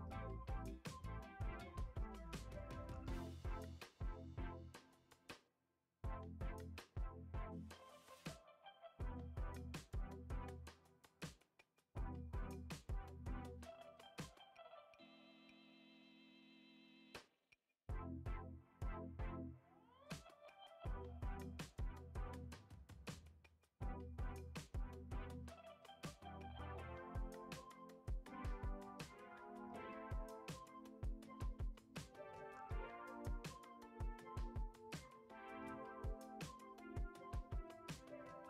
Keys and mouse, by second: 0.3 e, 1.8 g, 5.0 middle click, 7.9 alt+shift+click, 8.2 alt+shift+click, 9.5 shift+d, 11.4 KP_7, 12.1 middle drag, 12.7 g, 15.6-16.2 middle drag, 16.8 shift+middle click, 17.1-17.6 middle drag, 18.6 c, 19.8 click, 20.2 c, 23.0 x, 24.2 ctrl+z, 24.4 x, 25.3 middle click, 27.0 l, 27.6 shift+middle click, 29.1 s, 31.1 KP_7, 31.9 shift+middle click, 32.4 s, 33.4 g, 35.4 r, 37.3 s.